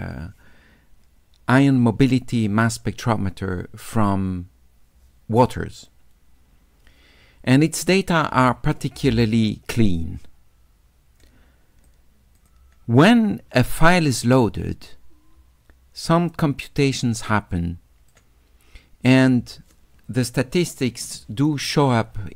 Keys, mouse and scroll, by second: 11.2 click, 12.4 click, 13.9 middle click, 15.1 middle click, 16.3-18.1 drag.